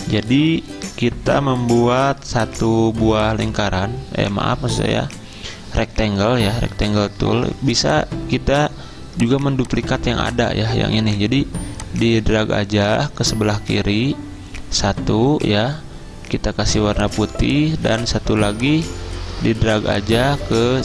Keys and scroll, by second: 6.7 ctrl+z, 7.6 v, 12.9 v.